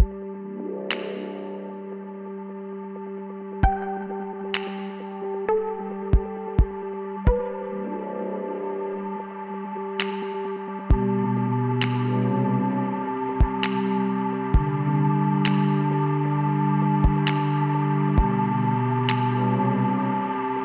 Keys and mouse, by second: 3.4-6.0 middle drag, 6.9 middle click, 7.6-9.1 drag, 8.4 l, 9.3 s, 12.7-14.4 drag, 15.3-17.9 middle drag, 16.0 a, 19.1-20.6 middle drag.